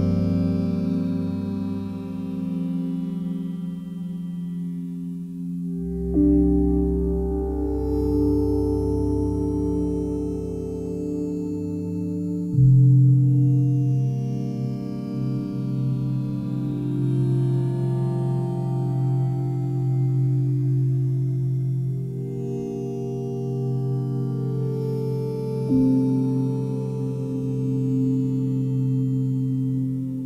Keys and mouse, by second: 0.7 click, 1.0 click, 2.6-3.4 typing, 4.4 Escape, 4.9 click, 5.2 click, 5.6 alt+click, 6.6 click, 6.7 click, 7.5 click, 7.7 click, 8.2 ctrl+click, 8.3 ctrl+click, 9.1 ctrl+click, 9.8 shift+click, 10.8 shift+click, 11.0 shift+click, 11.8 click, 12.3 shift+click, 12.9 shift+click, 13.6 click, 15.0 click, 15.8 click, 16.3 click, 17.8 7, 19.4 alt+click, 20.2-21.3 alt+drag, 23.5 r, 23.9 z, 24.9 click, 25.6 alt+click, 26.2-27.2 typing, 28.3 click, 29.0 click, 29.2 click.